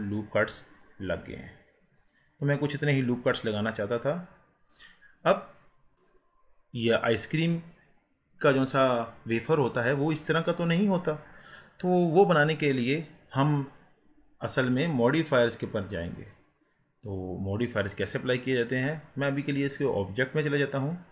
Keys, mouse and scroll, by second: 3.3 click, 3.9-6.4 middle drag, 6.4 scroll up 4, 7.9-14.3 middle drag, 18.6-21.1 drag.